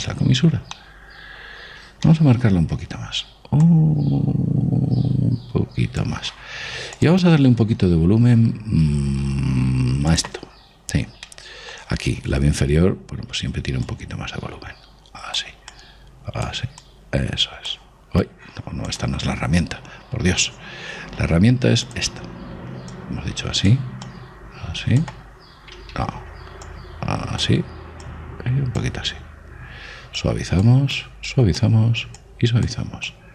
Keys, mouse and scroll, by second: 1.1-4.6 middle drag, 4.4 click, 7.7 click, 12.0-14.7 middle drag, 14.7-19.4 drag, 23.7-26.7 drag, 26.9 ctrl+z, 27.5-30.7 drag, 31.0-33.3 drag.